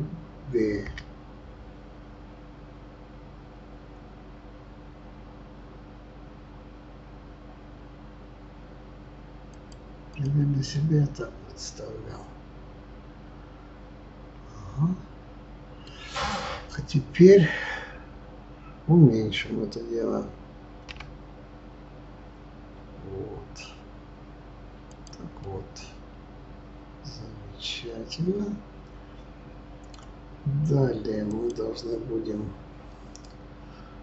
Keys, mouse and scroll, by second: 0.7 ctrl+b, 10.1 click, 10.7-13.7 middle drag, 17.9 Tab, 20.9 s, 25.4-28.4 middle drag, 31.2 click.